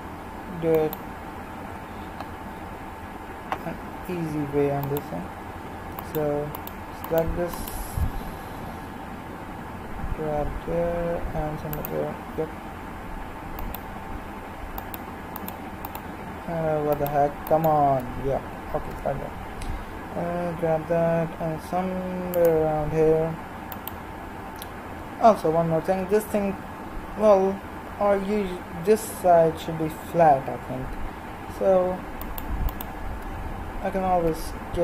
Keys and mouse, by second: 4.9-11.5 right drag, 8.5 g, 13.6-21.5 right drag, 18.9 g, 23.8-34.8 right drag, 34.0 s.